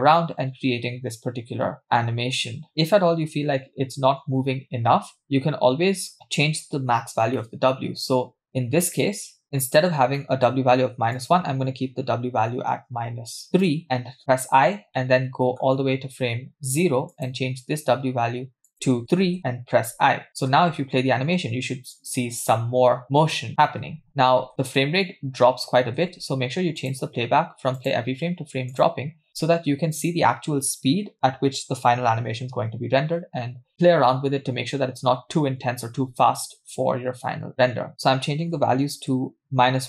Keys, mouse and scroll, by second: 6.1 space, 6.9-8.5 scroll up 4, 7.4 middle click, 9.0 click, 9.4 middle click, 9.7-11.2 scroll up 4, 10.2 middle click, 11.2-13.7 drag, 15.0 middle click, 17.2 click, 18.7 click, 19.9 i, 20.6 space, 24.0 space, 26.2 space, 26.7 space, 26.8-29.2 drag, 29.3 space, 37.9-39.1 drag, 37.9 middle click, 39.4-39.8 drag.